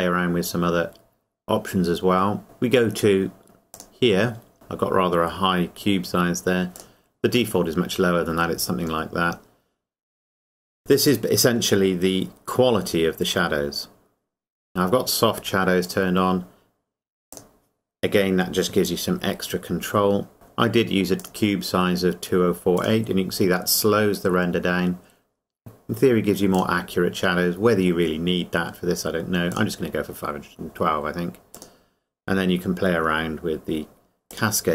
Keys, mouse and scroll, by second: 3.7 click, 6.8 click, 15.8 click, 21.2 click, 26.6 click, 29.5 click, 34.3 click.